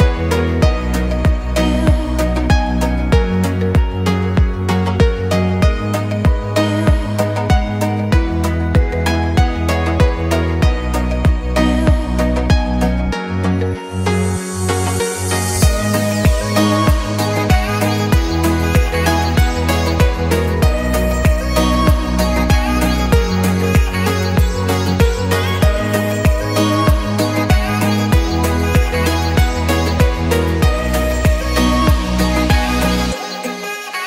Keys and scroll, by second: 17.1-22.4 typing, 23.5 s, 23.9 w, 24.9 Escape.